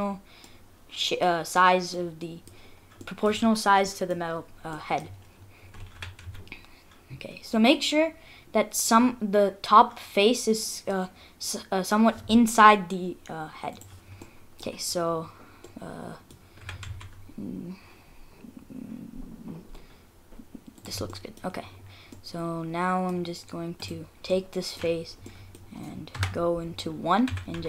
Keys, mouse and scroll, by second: 1.9 scroll down 1, 2.1 middle click, 2.7 scroll down 2, 3.0 middle click, 3.9 middle click, 4.2 scroll down 1, 4.4-5.2 scroll up 4, 4.8 middle click, 6.0 g, 14.1 scroll up 1, 14.2 middle click, 14.7-15.7 scroll up 7, 15.7 middle click, 16.6 g, 21.1 middle click, 21.6-22.2 scroll down 6, 22.1 middle click, 23.3-24.0 scroll down 3, 23.8 click, 24.3 middle click, 25.0 scroll down 2, 25.3 middle click, 26.2 KP_1, 26.7 scroll up 4, 27.3 g.